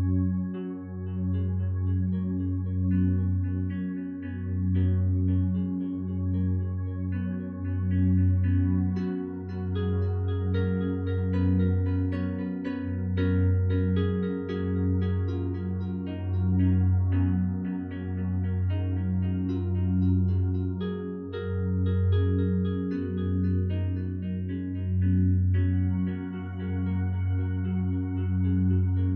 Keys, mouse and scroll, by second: 3.1 ., 3.3 5, 3.5 Return, 24.5 0, 24.7 ., 24.9 2, 25.1 5, 25.6 Return.